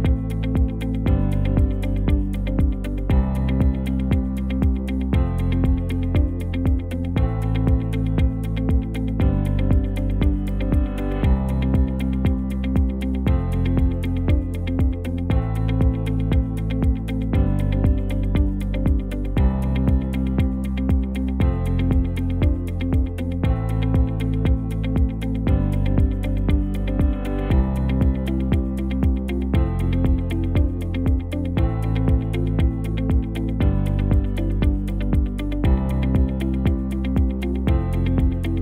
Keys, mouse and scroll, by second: 1.8 space, 12.1 space, 35.3 ctrl+z.